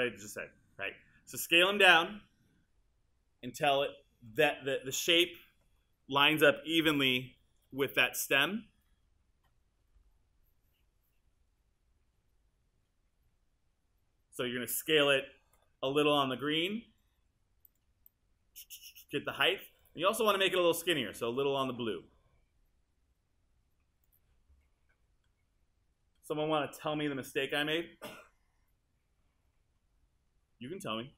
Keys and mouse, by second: 15.2 r.